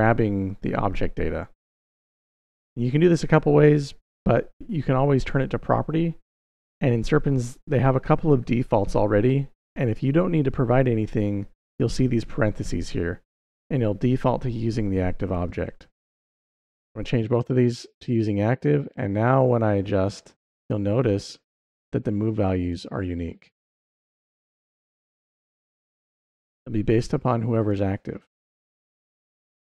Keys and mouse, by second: 4.1-5.1 drag, 15.9-16.9 drag, 19.8 click, 20.4 click, 22.4 click, 24.7-26.8 drag, 28.4-29.7 drag.